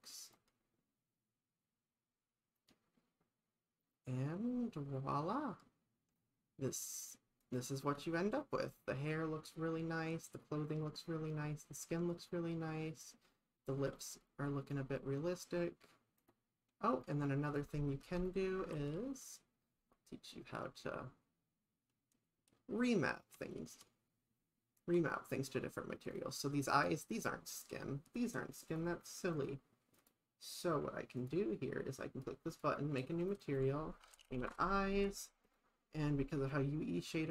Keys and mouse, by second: 2.6 click, 7.5 click, 17.0 middle click, 17.5 click, 18.2 click, 18.6 shift+`, 28.6 click, 29.4 click, 30.0 click, 31.2-31.5 drag, 32.5 drag, 33.3-35.1 drag, 35.5 click.